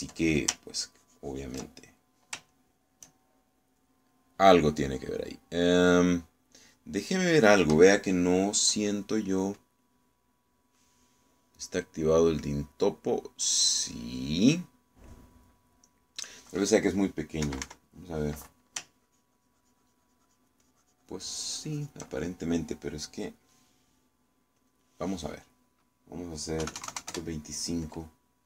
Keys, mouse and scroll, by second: 0.3 ctrl+click, 1.8-2.8 ctrl+drag, 2.8 ctrl+middle click, 3.6 ctrl+shift+middle click, 4.6 middle click, 13.0-17.5 drag, 18.5 KP_Subtract, 19.9-23.1 ctrl+drag, 25.7 click, 27.7 KP_2, 27.9 KP_5, 28.1 KP_Enter.